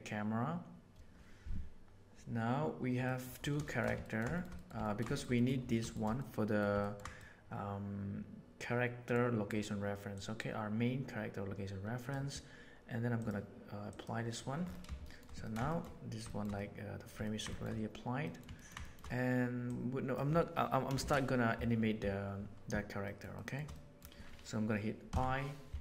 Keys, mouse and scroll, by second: 3.0 middle click, 3.6 shift+middle click, 4.0 ctrl+middle click, 4.3 shift+middle click, 4.5 middle click, 4.8 ctrl+middle click, 5.1 shift+middle click, 5.3 middle click, 5.9 shift+middle click, 6.1-6.5 middle drag, 6.8 ctrl+middle click, 7.1-9.1 middle drag, 10.1-12.1 drag, 13.1-14.0 drag, 15.0 shift+middle drag, 15.6 shift+middle click, 16.2 shift+middle click, 16.5-17.0 middle drag, 17.2 ctrl+middle click, 17.4 shift+middle click, 18.2 middle click, 18.5 ctrl+middle click, 18.8 shift+middle click, 19.6 right click, 21.0 shift+Left, 23.0 shift+middle click, 23.3 shift+middle click, 23.7 middle click.